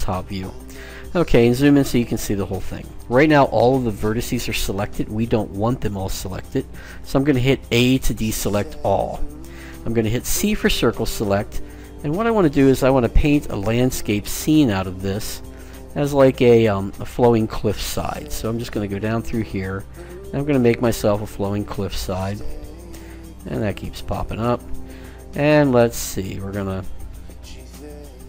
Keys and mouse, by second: 8.2 a, 10.5 c.